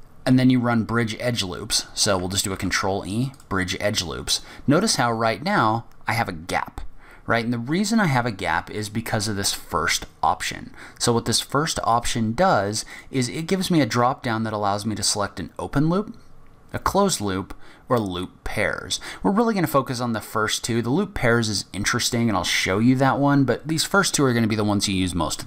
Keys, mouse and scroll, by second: 2.5 ctrl+e, 12.9 click.